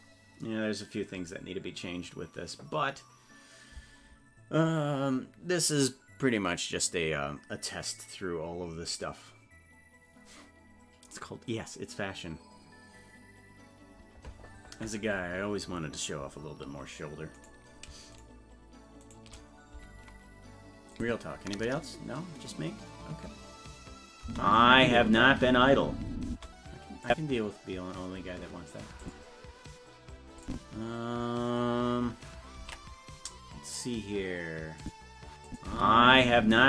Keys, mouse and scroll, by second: 17.5 right click, 18.3 shift+right click, 20.9 click, 24.2 space, 27.0 click, 29.0 click, 30.4 click, 33.0 ctrl+s, 34.8 click, 35.5 click, 35.6 space.